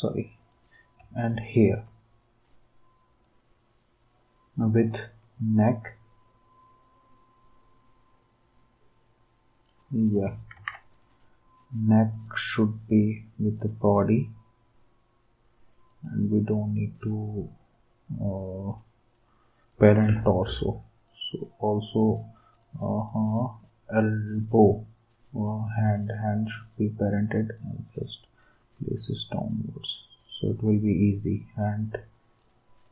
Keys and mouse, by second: 1.3 shift+click, 10.5 ctrl+s.